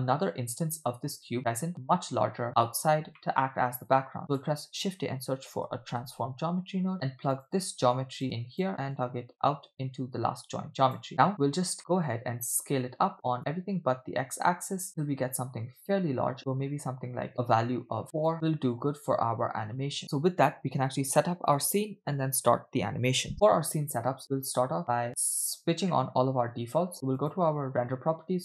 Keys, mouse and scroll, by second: 1.4-3.2 scroll down 1, 3.2 middle click, 3.5-4.1 scroll up 2, 4.2 shift+a, 8.2 click, 8.9-11.1 drag, 11.1 middle click, 11.4-11.7 scroll up 2, 11.8 middle click, 13.4-18.0 shift+drag, 18.3 shift+click, 18.3-19.8 middle drag, 19.9-20.8 scroll down 2, 20.8-21.2 scroll down 1, 24.8 middle click, 26.0-26.5 middle drag, 27.2 click.